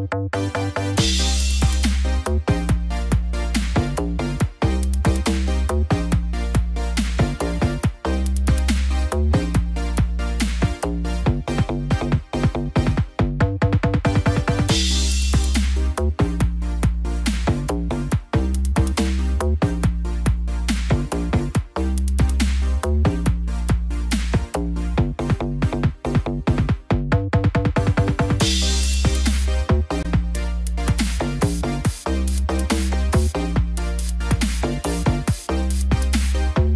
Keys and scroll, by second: 4.2 ctrl+j, 4.6 ctrl+t, 11.2 ctrl+t, 18.4 ctrl+j, 24.5 ctrl+t, 28.7 ctrl+0, 32.5 ctrl+j.